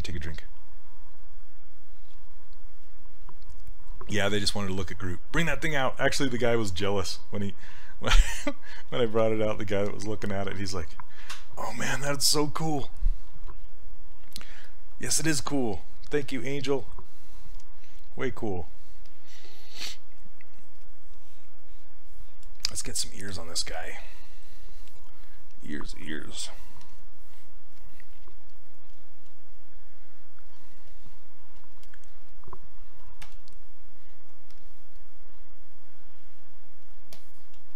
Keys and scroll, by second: 33.3 w.